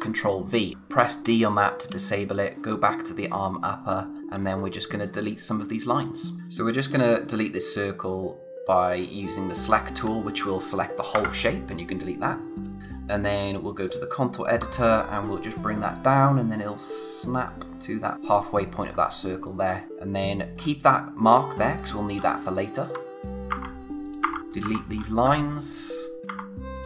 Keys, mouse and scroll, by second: 0.7 d, 1.8 click, 3.3-3.8 scroll up 1, 3.9 space, 4.1 click, 4.2 space, 4.6-5.8 scroll up 1, 5.8 click, 9.6 click, 12.6 click, 18.1-18.9 scroll up 1, 18.9 space, 19.1 click, 19.4 space, 19.9-21.4 scroll up 1, 21.6 space, 21.8 click, 22.1 space, 22.7 click, 24.9-25.2 scroll down 1, 25.2 space, 25.4 click, 25.7 space, 26.2 click.